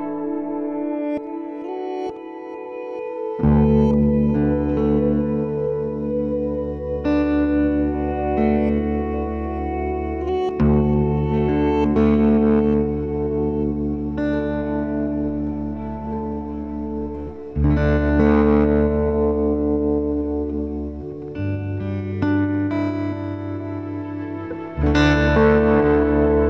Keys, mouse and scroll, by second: 2.9 click, 3.3 g, 4.3 click, 4.6 g, 6.8 click, 7.6 click, 8.5 shift+click, 8.9-11.4 right drag, 11.4 click, 12.0 g, 13.9 click, 14.2 g, 15.4 click, 15.9 g, 18.2 click, 18.8 g, 21.3 click, 22.1 shift+click, 22.6-23.7 right drag, 23.7 click, 24.4 g, 25.6-26.3 scroll down 1, 26.3 shift+middle click.